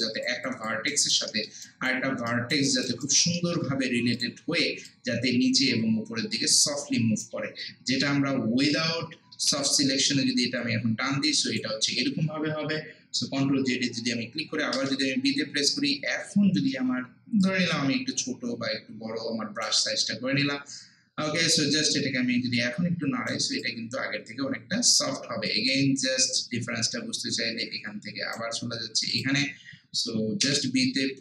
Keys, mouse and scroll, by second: 0.0 alt+right click, 0.5 alt+click, 0.9 alt+right click, 1.3 alt+middle click, 1.7 alt+right click, 2.7 alt+click, 3.0 alt+right click, 3.4 alt+middle click, 4.2-7.9 drag, 7.9 ctrl+z, 10.6-13.2 drag, 13.2 ctrl+z, 17.1-17.9 typing, 17.4 click, 19.9 typing, 21.7-23.6 drag, 21.7 typing, 23.6-26.4 alt+drag, 26.4-29.1 right drag, 29.1 click, 30.4 b.